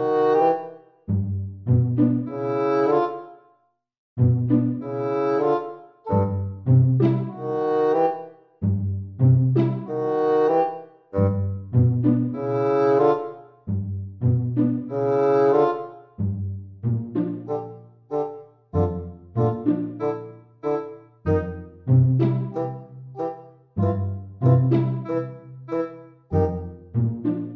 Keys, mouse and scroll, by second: 0.0 click, 3.5 click, 9.9 Tab, 14.5 click, 17.6 super+z, 17.8 super+r, 24.3 middle click, 25.6 click, 25.6 scroll down 1, 25.9 click, 26.8 click.